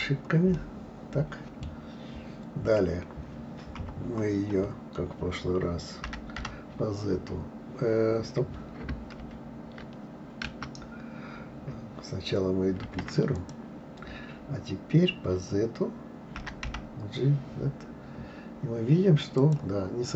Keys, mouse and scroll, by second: 0.5-3.6 middle drag, 3.7 KP_3, 6.1 g, 12.9 shift+d.